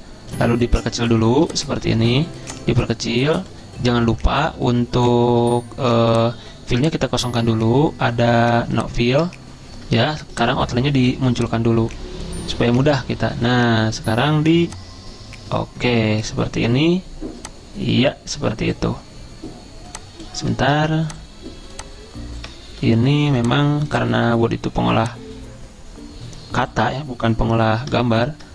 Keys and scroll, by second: 23.0 ctrl+z.